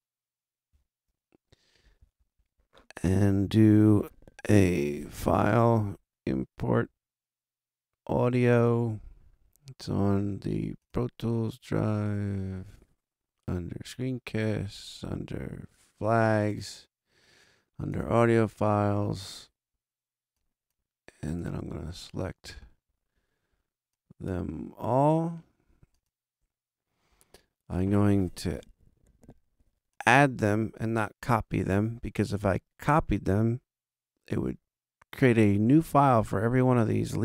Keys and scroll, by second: 0.7 shift+super+0.